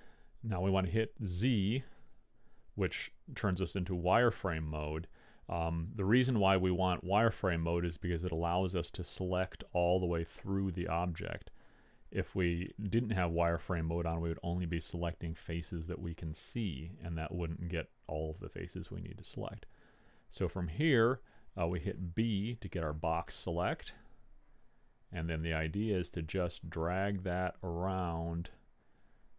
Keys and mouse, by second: 1.9 z, 3.0-6.7 middle drag, 17.5-20.8 drag, 22.4 b.